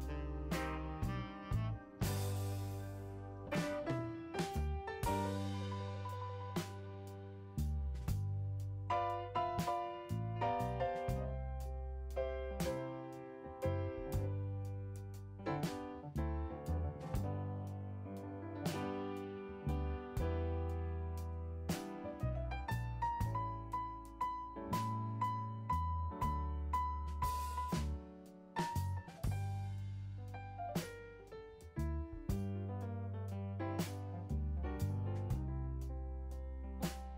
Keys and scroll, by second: 34.6-35.6 typing.